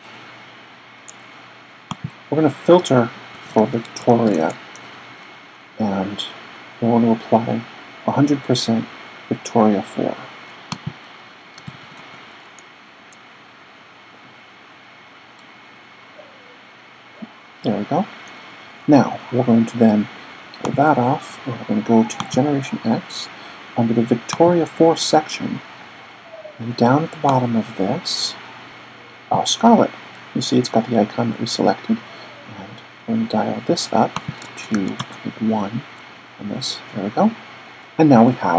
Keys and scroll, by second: 2.9-4.5 typing, 10.7-12.0 typing, 34.7 1.